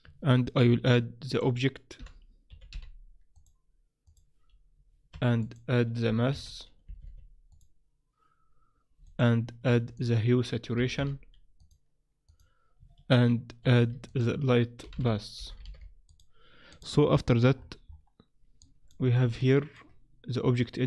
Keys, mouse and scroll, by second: 0.6 shift+a, 5.1 shift+a, 9.6 shift+a, 13.6 shift+a, 17.6-18.6 scroll up 11, 18.6 click, 19.4 shift+middle click, 20.5 click.